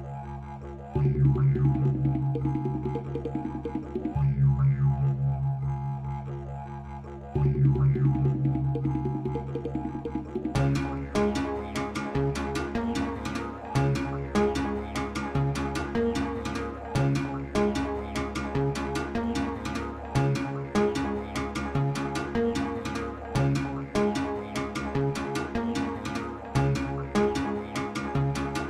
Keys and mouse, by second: 0.3 click, 1.9-2.8 drag, 3.3-5.0 drag, 5.3 space, 6.7 space, 7.2 click, 14.5 space, 15.8-19.6 drag, 17.1 KP_0, 17.4 KP_0, 17.5 KP_0, 20.4 space, 20.4 k, 20.4 x, 21.1 Page_Up, 21.9 click, 22.9 shift+s, 23.5 ctrl+s, 23.8 space, 28.1 space.